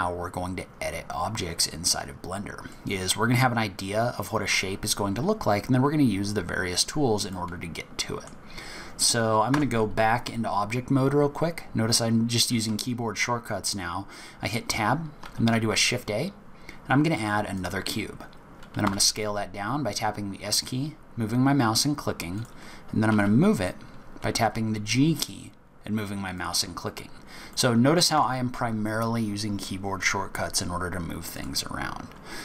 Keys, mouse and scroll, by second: 0.9-1.4 scroll down 2, 1.4-1.9 scroll up 2, 1.9 scroll down 2, 2.7 middle click, 6.3 scroll down 4, 6.8-7.3 scroll up 2, 7.3 middle click, 7.3-8.1 scroll up 1, 8.6 scroll down 2, 9.0-9.4 scroll up 1, 9.5 Tab, 15.2 shift+a, 18.2-18.6 scroll down 7, 18.8 s, 23.1 g, 26.7-27.5 scroll up 7, 27.5 middle click, 28.1 Tab, 31.3 click, 32.2-32.4 scroll up 2.